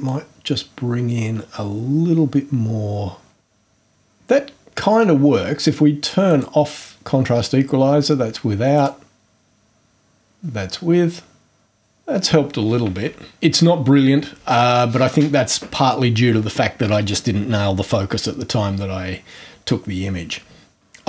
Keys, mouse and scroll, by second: 0.0-3.4 drag, 6.3 click, 8.7 click, 13.3 ctrl+scroll up 2.